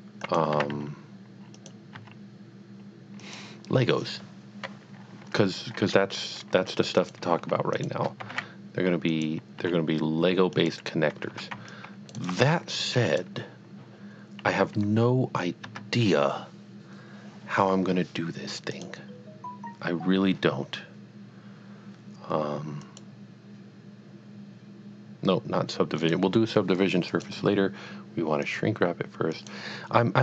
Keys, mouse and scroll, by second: 0.3 click, 0.6 e, 1.6 click, 2.0 s, 3.2 click, 6.9 click, 7.7 shift+click, 8.3 g, 8.4 z, 9.1 click, 9.5 s, 10.6 click, 11.7 click, 12.0 click, 12.1 right click, 12.4 g, 13.2 click, 15.7 Tab, 18.7 Tab, 18.8 click, 22.8 click, 23.0 click, 26.0 click, 27.1 click, 28.4 click, 29.4 click.